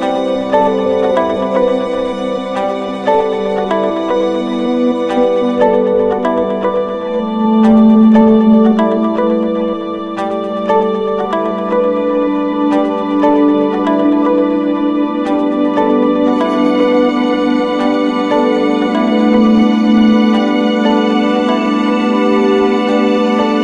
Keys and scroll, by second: 3.2 ctrl+-, 4.9 ctrl+z, 7.0 ctrl+=, 10.0 Return, 12.3 ctrl+z.